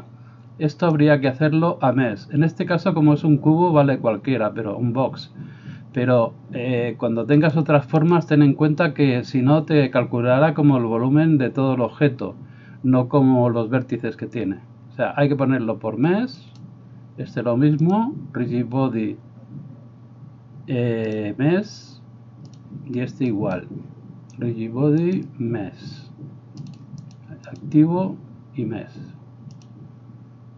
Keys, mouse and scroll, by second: 23.4 middle click, 23.4 right click, 26.8 middle click, 27.2-30.5 drag.